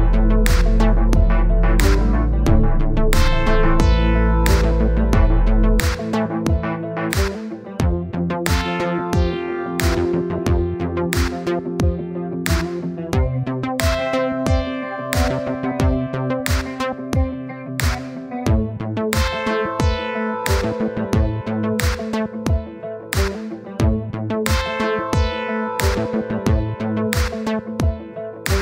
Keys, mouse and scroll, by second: 2.1 ctrl+z, 2.6-9.1 drag, 10.8-11.9 scroll up 1, 11.9 scroll up 1, 12.1-13.3 middle drag, 13.9-16.1 middle drag, 16.9-18.1 middle drag, 18.1 KP_1, 19.4 click, 20.8 click, 21.2-22.4 middle drag, 22.4 click, 22.7-23.7 middle drag, 23.7-25.6 drag, 25.8-27.0 drag.